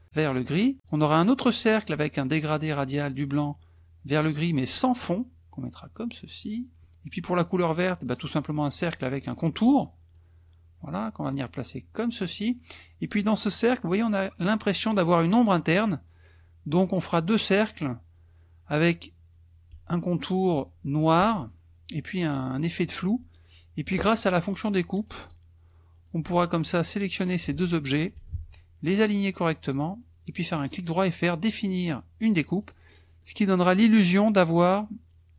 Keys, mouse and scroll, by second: 0.8 click, 4.9-6.6 drag, 8.0 click, 10.1-12.4 drag, 16.8 click, 24.2-25.5 drag, 26.0-27.4 drag, 28.3 ctrl+shift+a, 29.2 click, 29.6 click, 30.7 right click, 32.2 click, 32.6 click, 33.2-34.4 middle drag, 33.6 click.